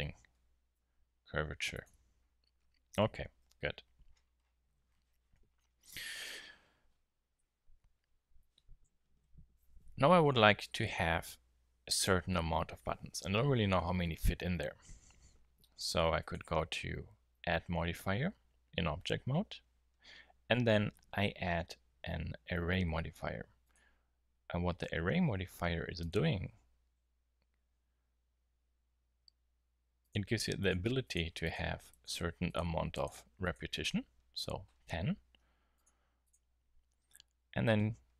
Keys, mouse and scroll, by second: 0.7 s, 1.9 Tab, 3.0 KP_1, 3.4 KP_7, 16.2 click.